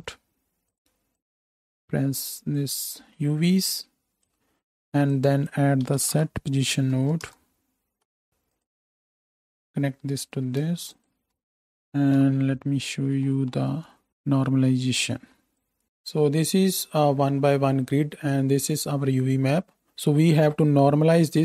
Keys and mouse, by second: 1.2-8.6 middle drag, 8.6 click, 9.0-11.0 middle drag, 11.0-12.4 ctrl+shift+drag, 12.1 KP_7, 12.4-15.7 right drag, 15.7-21.4 middle drag.